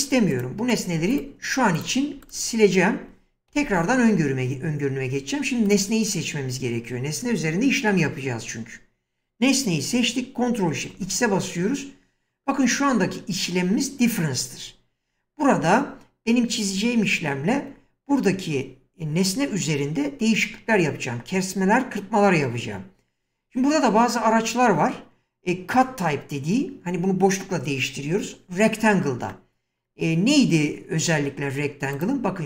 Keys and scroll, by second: 0.1 x, 11.0 ctrl+x.